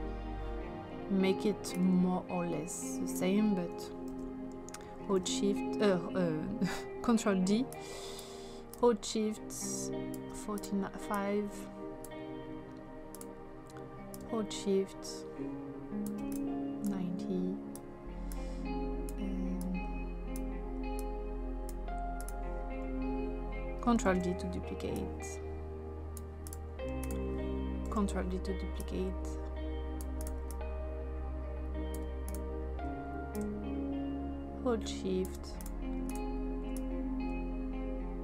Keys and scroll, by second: 4.1 ctrl+z, 5.1 ctrl+d, 24.1 ctrl+d, 28.2 ctrl+d.